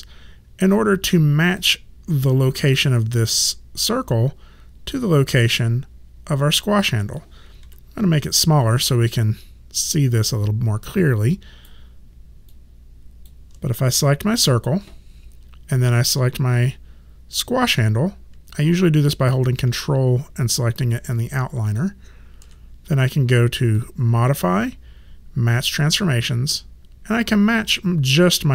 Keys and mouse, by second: 1.5 click, 7.6 r, 8.6 click, 12.5 click, 21.7 click, 23.8 click.